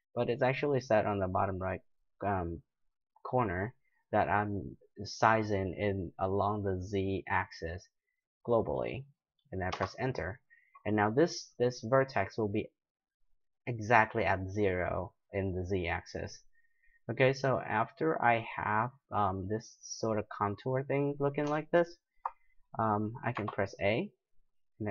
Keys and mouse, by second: 11.9-16.3 right drag, 16.3-24.9 middle drag, 23.3 a.